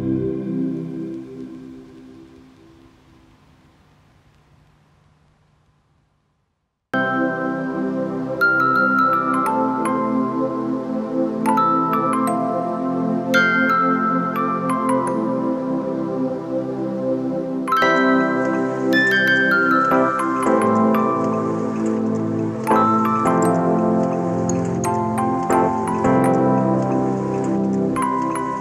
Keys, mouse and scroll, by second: 5.7 ctrl+d, 14.9 alt+shift+click, 19.4 alt+shift+click, 20.7 ctrl+click.